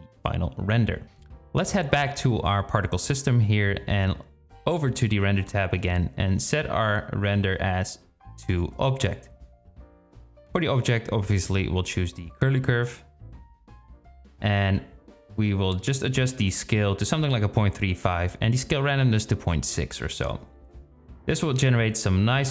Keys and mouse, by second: 0.0 Tab, 0.7 Tab, 2.0 KP_Divide, 2.4 KP_0, 7.8-10.0 drag, 15.7-17.5 drag, 17.9-19.3 drag, 21.8 space.